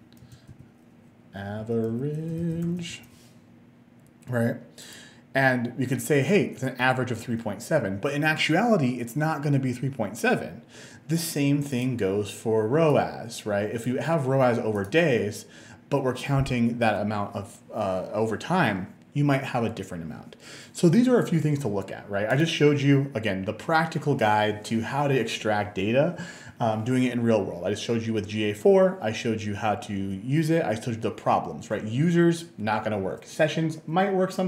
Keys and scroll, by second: 0.5-3.3 typing.